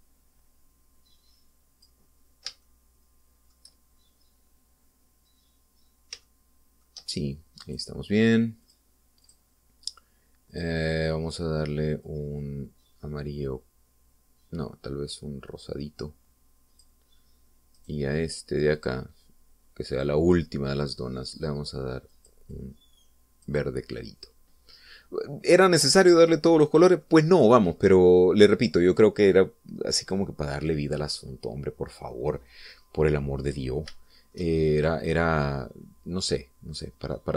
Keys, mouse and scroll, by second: 0.7-3.1 drag, 3.7 shift+middle click, 7.3 shift+middle click, 8.7 right click, 9.7 click, 10.3 click, 11.6 click, 13.1-18.1 drag, 18.9 right click, 19.9 click, 21.0 click, 23.2 click, 23.6 click, 25.3-25.7 scroll down 1, 25.9 scroll up 2, 26.4 scroll down 2, 26.7-28.3 middle drag, 28.5 scroll down 2, 28.9 scroll up 1, 31.1 right click, 34.1-34.5 scroll down 2, 35.1-37.3 shift+middle drag.